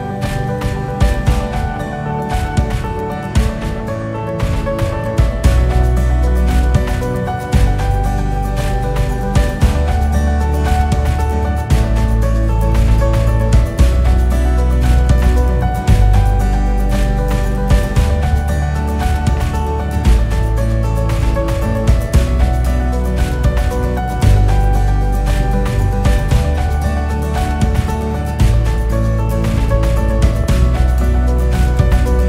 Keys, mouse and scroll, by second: 1.4 click, 2.0 s, 5.0 click, 5.7 s, 10.9 g, 14.3 click, 15.0 g, 17.3 click, 19.0 g, 22.5-23.0 drag, 23.2-23.6 drag, 23.6 scroll up 1, 23.9-24.4 scroll down 2, 24.4 KP_8, 25.3-25.7 KP_6, 25.9-26.4 drag, 26.7 KP_6, 27.0 KP_6, 27.1-30.2 KP_6, 30.7-31.2 scroll down 1, 31.2-31.6 scroll up 6, 31.7 scroll down 7.